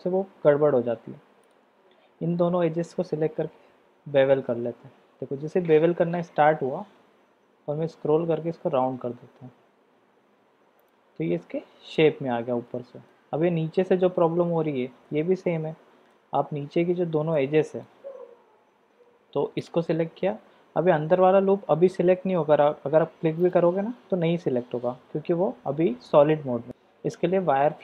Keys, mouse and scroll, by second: 3.6 ctrl+b, 11.6 Tab, 11.9-13.1 middle drag, 14.2-15.1 middle drag, 15.8 Tab, 16.1 middle click, 17.3 click, 23.4 alt+shift+click, 26.7 shift+z.